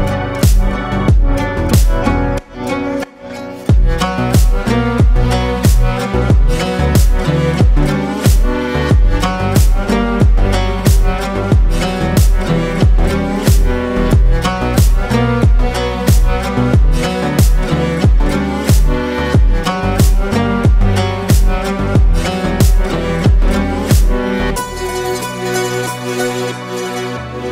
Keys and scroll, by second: 13.7 ctrl+space, 14.8 ctrl+space, 16.5 ctrl+space, 17.7 ctrl+space, 19.4 ctrl+space, 20.0 ctrl+space, 20.8 ctrl+space.